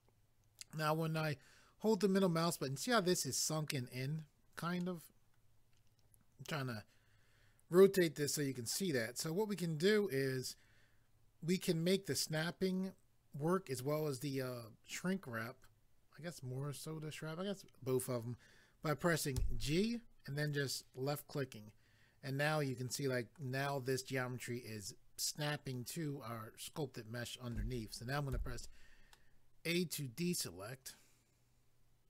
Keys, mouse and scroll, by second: 4.8 middle click, 19.4 g, 20.4 click, 21.3 middle click, 28.3 a, 29.1 middle click.